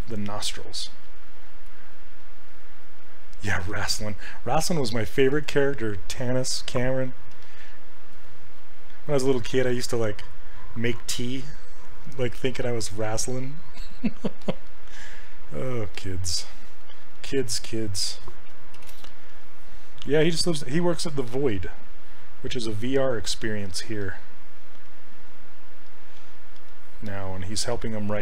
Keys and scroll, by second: 7.4 s, 17.7 s, 18.8 shift+f.